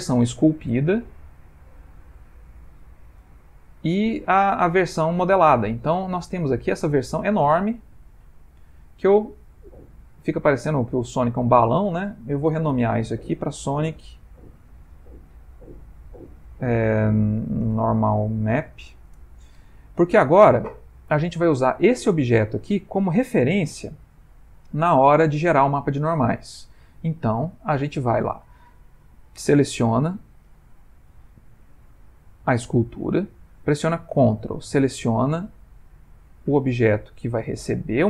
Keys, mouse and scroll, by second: 0.1 middle click, 1.7 Tab, 2.5 middle click, 3.6 /, 4.1 middle click, 5.7 middle click, 6.0 ctrl+middle click, 6.6 middle click, 7.2 ctrl+middle click, 8.1 click, 8.9 ctrl+middle click, 9.4 middle click, 12.6 F2, 20.7 middle click, 23.9 /, 24.6 middle click, 32.5 click, 37.6 ctrl+click.